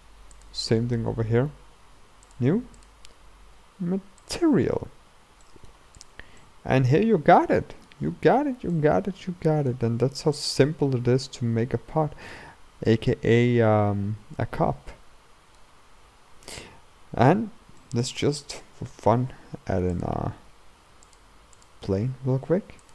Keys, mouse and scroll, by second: 2.4 click, 4.4-5.5 drag, 5.5 middle click, 6.1 click, 6.4-10.0 middle drag, 10.0-10.6 scroll up 1, 10.6-12.5 middle drag, 12.5-12.9 scroll down 2, 12.9-17.3 middle drag, 17.3-17.8 scroll down 3, 17.8-21.7 middle drag, 21.7 shift+a, 22.0 s.